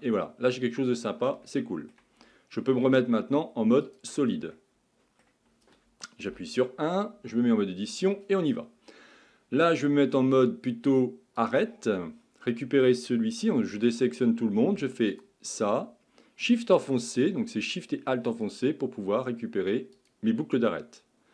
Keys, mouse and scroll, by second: 0.2 scroll up 2, 0.5 scroll down 1, 1.5-2.7 shift+middle drag, 2.7 z, 4.5-6.3 middle drag, 6.3 KP_1, 7.2 Tab, 11.4-13.7 drag, 13.7 a, 15.1 alt+click, 18.3 alt+shift+click, 20.0 alt+shift+click.